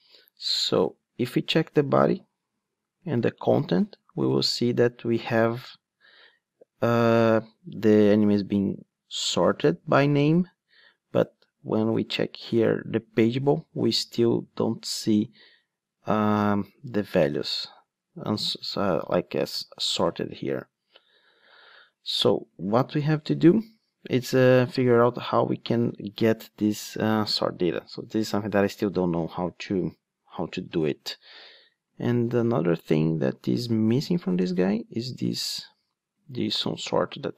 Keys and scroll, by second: 3.0 Down, 3.1 Right, 3.5 Down, 31.0 alt+super+r, 33.6 ctrl+Tab.